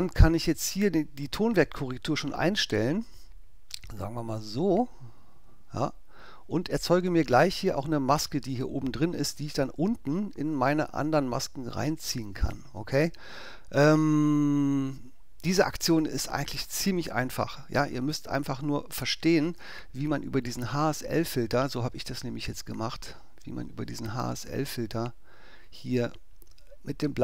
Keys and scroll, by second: 19.6 BackSpace.